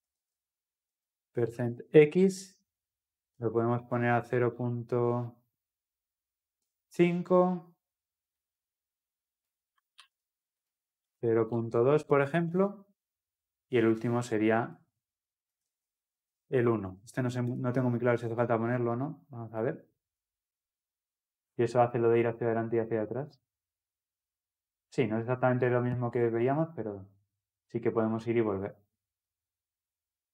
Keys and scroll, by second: 2.2 Return, 10.0 ctrl+c, 12.7 ctrl+v, 15.7 ctrl+v, 19.7 ctrl+F10.